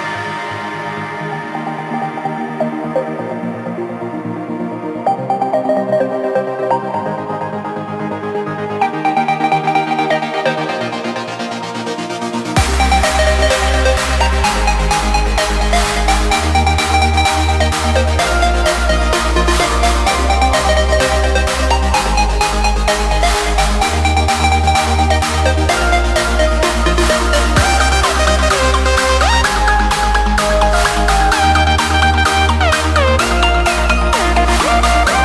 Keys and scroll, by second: 2.1 ctrl+space, 5.2 ctrl+3, 6.5 ctrl+g, 6.9 ctrl+space, 7.5 ctrl+alt+3, 8.8 ctrl+space, 9.4 ctrl+3, 9.6 ctrl+space, 16.3 ctrl+space, 16.9 ctrl+d, 26.8 ctrl+space.